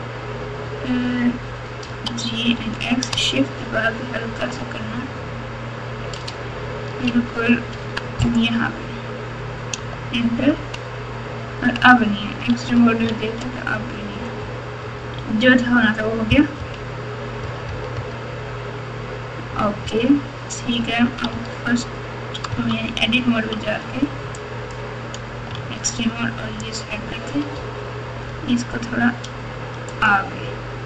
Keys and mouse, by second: 1.8 g, 10.5 Tab, 12.5 alt+z, 13.0 alt+z, 14.4 Tab, 14.8 Tab, 16.6 KP_3, 17.4 KP_4, 17.6 KP_4, 17.9 KP_4, 19.4 KP_4, 19.8 KP_3, 21.3 1, 22.5 Tab, 23.5 1, 24.4 click, 25.5 alt+z, 25.9 click, 27.5 g.